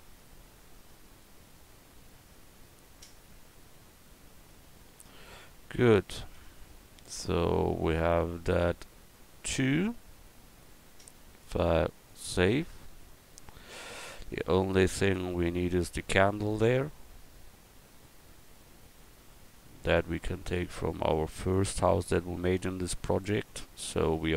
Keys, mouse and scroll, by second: 5.2 Tab, 5.9 a, 6.3 Tab, 11.2-12.7 middle drag, 13.2 middle click, 14.2 middle click.